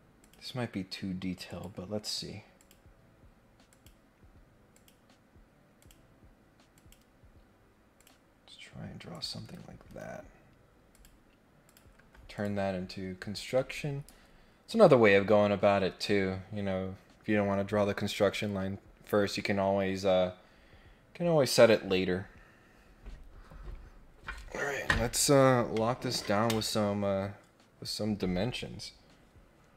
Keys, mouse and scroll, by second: 0.2 click, 1.4 click, 2.5 click, 3.7 click, 4.7 click, 5.8 click, 6.7 click, 8.0 click, 9.1 click, 9.4 Escape, 9.8 Escape, 10.9 click, 11.6 click, 12.3 click.